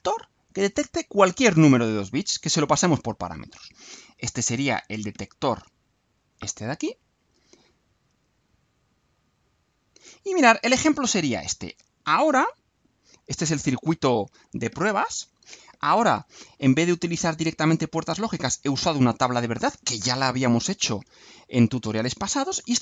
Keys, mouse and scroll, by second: 5.4 click, 7.2-8.4 drag, 9.0 click, 10.1 scroll down 2, 10.8-12.2 right drag.